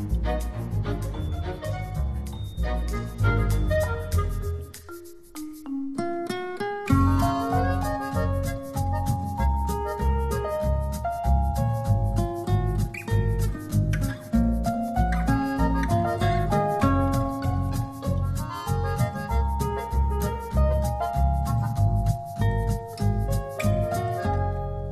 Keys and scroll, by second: 6.8 alt+super+d.